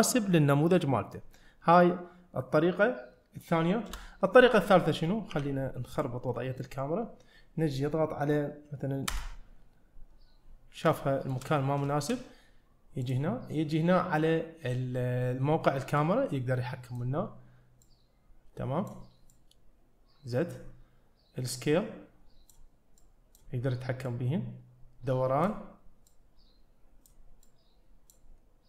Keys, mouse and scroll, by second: 3.9 KP_0, 5.4 g, 6.4 middle click, 9.1 KP_0, 11.1 shift+middle click, 12.1 shift+middle click, 13.1 click, 16.0-17.1 drag, 17.9-18.9 drag, 19.4-20.6 drag, 21.6 click, 23.1 click, 24.1-25.5 drag, 26.1-27.1 drag, 27.5 click.